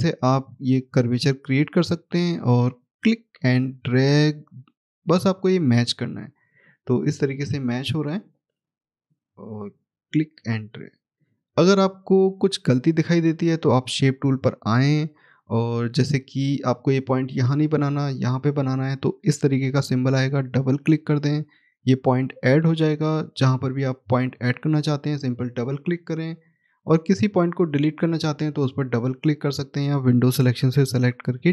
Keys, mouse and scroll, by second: 14.5 click, 15.6 scroll up 1, 20.4 click, 20.6 double click, 24.3 click, 24.5 double click, 27.9 click, 28.2 double click, 29.1 click, 31.2 click.